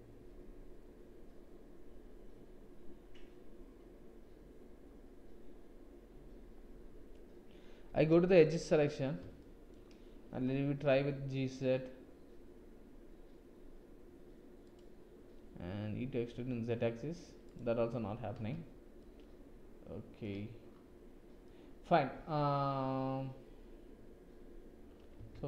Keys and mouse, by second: 9.4 shift+click, 10.7 g, 16.0 e, 17.9 ctrl+z, 19.0 click, 21.4 click, 25.2 Tab.